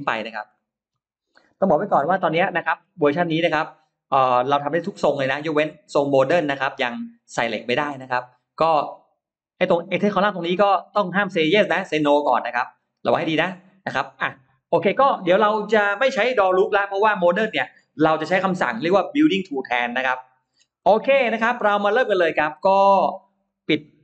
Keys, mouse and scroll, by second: 0.4 middle click, 0.4 scroll up 1, 0.8 middle click, 1.8 Delete, 2.0 middle click, 3.5 click, 10.6 click, 12.3 click, 20.4-20.7 scroll down 1, 20.7 middle click, 21.2-21.6 scroll down 1, 21.7 scroll up 1, 23.3 click.